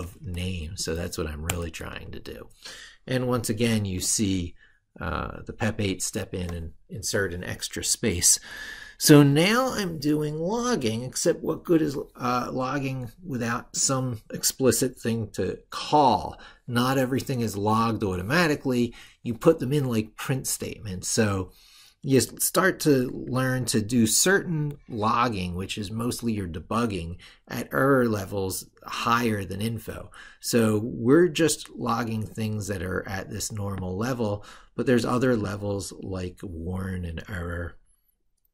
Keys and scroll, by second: 23.4 ctrl+super+Left.